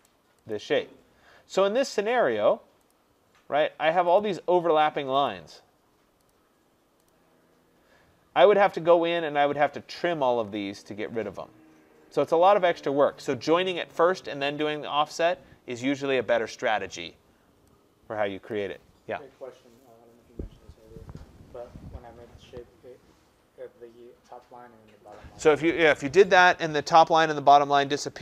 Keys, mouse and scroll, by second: 0.1 right click, 0.6 right click, 3.0 click, 7.1 click, 8.9 middle click, 9.0 middle click, 12.1 middle click, 12.1-13.5 scroll, 18.6 click.